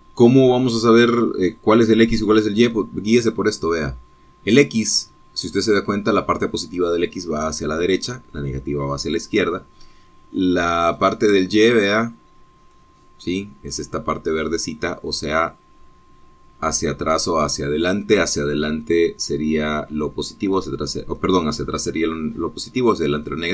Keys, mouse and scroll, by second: 12.2-14.2 middle drag, 15.7-18.9 middle drag.